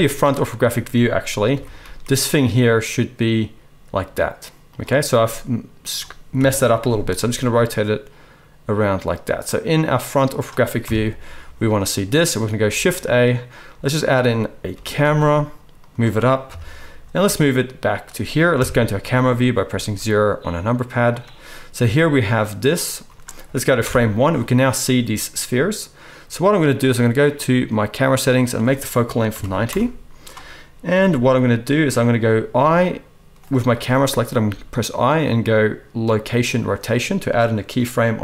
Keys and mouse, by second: 1.5 r, 6.3 KP_7, 7.1 r, 10.8 KP_1, 12.4-22.3 shift+drag, 12.7 shift+a, 14.7 g, 16.5 KP_3, 17.2 g, 18.5 KP_0, 19.6 g, 21.8 g, 22.3-27.3 right drag, 23.8 shift+Left, 27.3 middle click, 27.4-28.0 right drag, 28.0 middle click, 28.2 right click, 28.4-31.8 middle drag, 30.9 g, 31.1-33.5 drag, 31.1 right click, 32.5 g, 33.5-38.2 middle drag.